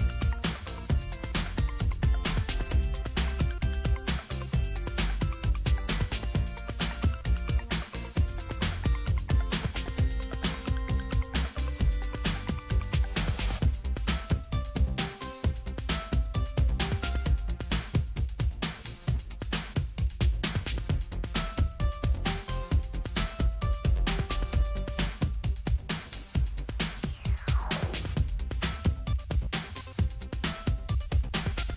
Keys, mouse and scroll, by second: 0.8-1.9 drag, 3.8 click, 6.4 click, 7.1-7.6 scroll down 1, 8.2 click, 9.7 click, 12.3 click, 15.4 click, 17.6 click, 19.4-23.7 drag, 24.6-28.4 drag, 30.4-31.7 drag.